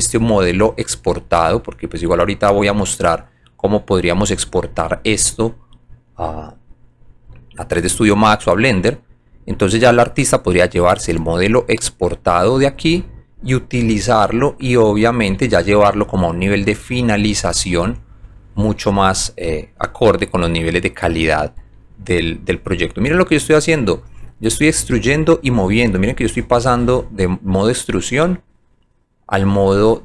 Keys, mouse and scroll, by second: 2.6 click, 4.5 alt+click, 4.8 alt+right click, 5.3 alt+click, 6.0 alt+middle click, 6.9 alt+right click, 7.7 alt+click, 8.1 alt+right click, 9.2 alt+click, 10.9-12.2 drag, 12.5 alt+click, 12.9 alt+right click, 13.5 alt+click, 13.9 alt+middle click, 14.6 alt+right click, 16.0 alt+click, 16.7 click, 17.5-18.6 alt+middle drag, 19.3 alt+click, 20.5 click, 21.8 alt+click, 22.8 alt+right click, 23.4 alt+middle click, 24.1 alt+right click, 25.1 alt+middle click, 27.0 alt+click, 28.6 click.